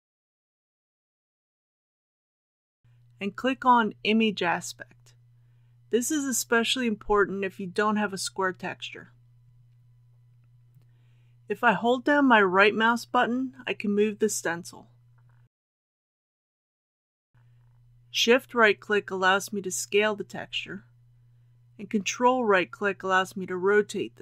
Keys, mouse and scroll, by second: 10.7 KP_1, 11.5-15.6 right drag, 18.5-21.1 shift+right drag, 21.5-24.2 ctrl+right drag.